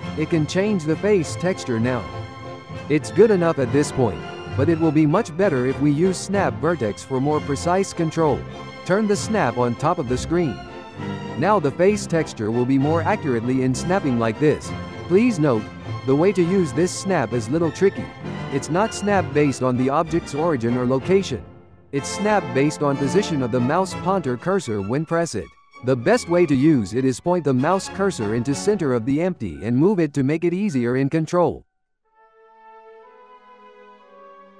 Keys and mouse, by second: 0.2-1.2 ctrl+middle drag, 1.2 g, 5.7 z, 7.1 g, 9.7-11.0 shift+middle drag, 11.0 click, 12.0 drag, 12.4 4, 13.3 click, 13.7-14.3 ctrl+middle drag, 14.2 g, 18.4 g, 26.7 g, 30.2 click, 30.2 n, 30.4 Tab, 31.5 click, 32.5 shift+s, 33.2 shift+s.